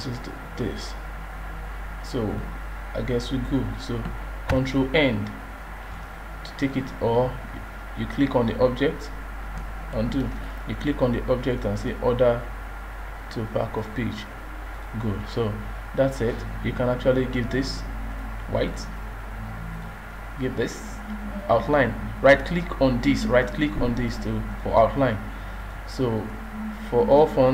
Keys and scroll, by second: 4.5 ctrl+End, 9.9 ctrl+z.